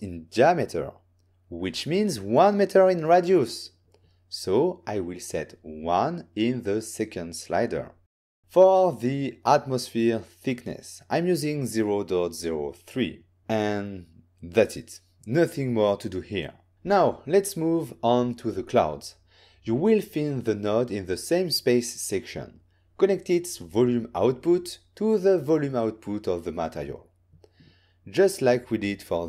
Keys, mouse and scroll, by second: 0.0 click, 3.0 click, 3.0 n, 3.7 ctrl+middle click, 5.5 click, 6.4 ctrl+scroll up 1, 6.4 1, 7.1 Return, 8.4 click, 10.2 ., 11.5 0, 12.8 3, 13.9 Return, 20.8 click, 21.0 click, 21.9 click, 23.3 n, 23.9 click, 25.9 click.